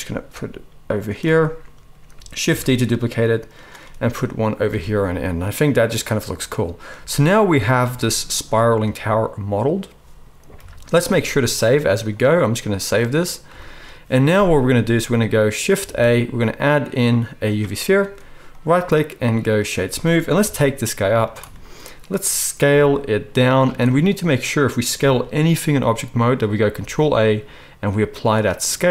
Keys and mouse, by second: 0.3 g, 2.5 shift+d, 3.8 right click, 4.7 alt+a, 10.5 KP_1, 11.2 ctrl+s, 15.8 shift+a, 18.9-21.4 right drag, 20.4 g, 21.4-25.6 shift+drag, 22.7 s, 25.0 s, 25.6-28.9 middle drag, 26.8 ctrl+a.